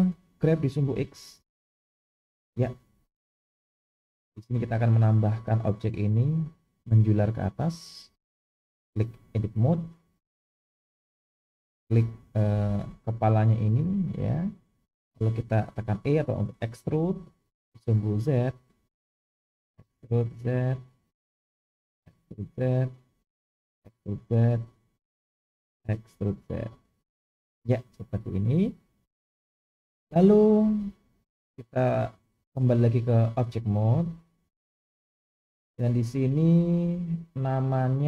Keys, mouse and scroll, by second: 0.4 g, 8.3-9.4 drag, 10.4-10.9 scroll up 1, 11.4 click, 12.8-13.4 scroll up 2, 13.4 shift+middle click, 14.2-15.3 scroll down 2, 17.1 e, 19.8 e, 22.0 e, 23.7 e, 26.1 e, 30.1-32.7 drag, 37.2 click.